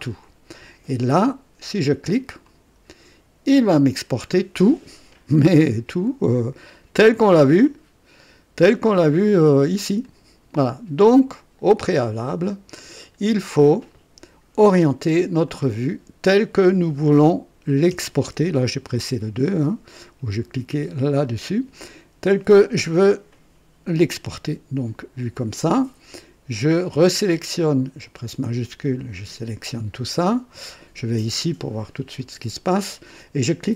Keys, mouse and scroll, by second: 2.4 click, 3.6-4.5 scroll down 4, 5.5-6.1 scroll down 2, 7.6-9.4 drag, 10.0 click, 11.2 click, 12.7 click, 15.4 click, 17.9 KP_2, 21.2 click, 27.1 click, 29.0 shift+click, 32.1 click.